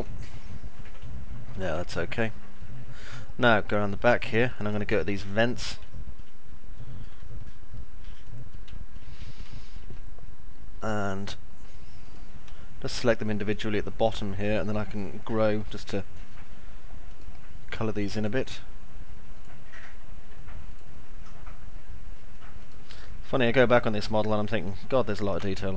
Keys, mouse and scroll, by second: 0.0-1.7 alt+middle drag, 1.8 middle click, 2.5-3.7 alt+middle drag, 4.3 middle click, 4.7 alt+middle click, 5.3 middle click, 5.8 alt+middle click, 6.7-8.0 middle drag, 8.3 middle click, 8.7 alt+middle click, 9.0 middle click, 9.5 alt+middle click, 13.5 ctrl+click, 18.0 ctrl+click, 19.3 ctrl+click, 23.7 ctrl+click.